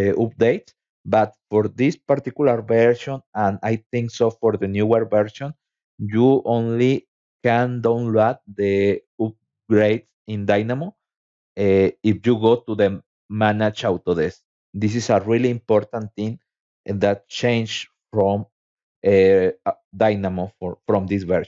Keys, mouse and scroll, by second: 2.5 click, 12.9 click, 14.4 click, 16.1 click, 19.4 click, 20.1-21.1 scroll down 3.